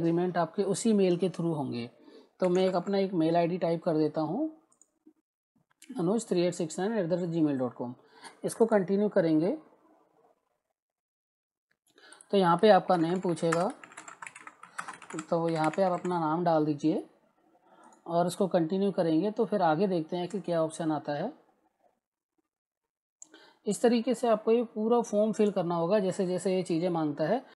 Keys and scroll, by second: 2.1-3.3 typing, 12.6-16.4 typing.